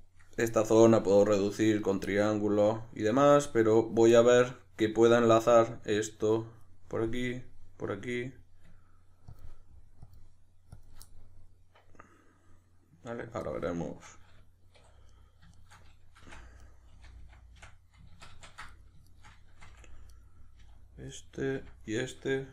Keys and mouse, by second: 1.8 right click, 2.0-8.3 middle drag, 8.3 right drag, 9.3-11.1 ctrl+drag, 11.1-14.8 middle drag, 14.8 2, 15.1 right click, 15.5 shift+right click, 16.3 f, 16.6 right click, 16.9 f, 18.7 right drag, 19.1 shift+right click, 19.7 f, 20.1 right click, 20.6 f, 21.2-22.5 middle drag, 21.5 f.